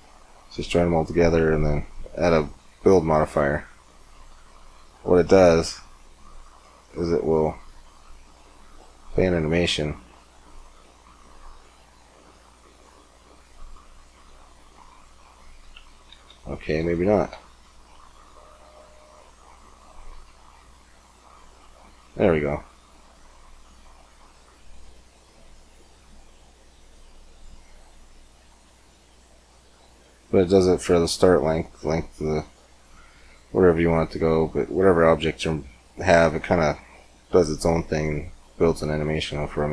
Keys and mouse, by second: 1.3 middle click, 2.1-3.2 drag, 5.4-7.3 drag, 7.4-9.2 drag, 12.9 click, 13.1-15.9 drag, 15.9 ctrl+z, 16.6 ctrl+z, 17.1 ctrl+z, 19.9 click, 22.8-24.1 middle drag, 24.6-27.4 middle drag, 28.1 middle click, 28.3-30.2 drag, 32.6-35.1 middle drag, 37.9-39.1 middle drag, 39.1-39.7 drag.